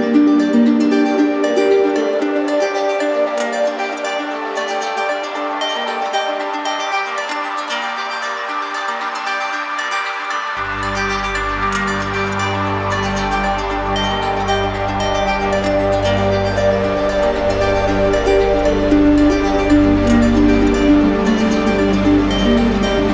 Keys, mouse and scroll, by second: 0.9 click, 2.5 click, 3.6 ctrl+z, 5.3 ctrl+shift+z, 6.5-7.5 drag, 13.2-14.6 drag, 15.1 ctrl+z, 16.5 click, 18.0 click, 18.7 click, 19.4 click, 20.3 right click, 21.5 click, 22.8 click.